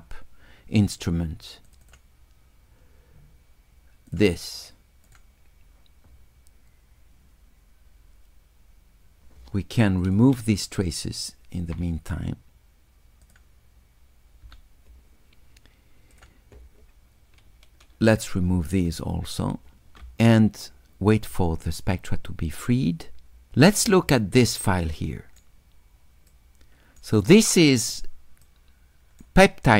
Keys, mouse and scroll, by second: 1.7 click, 1.9 click, 4.1 click, 5.1 click, 10.0 click, 13.3 click, 16.2 click, 18.1 click, 24.5 shift+right click, 26.3 shift+click, 28.4 shift+click.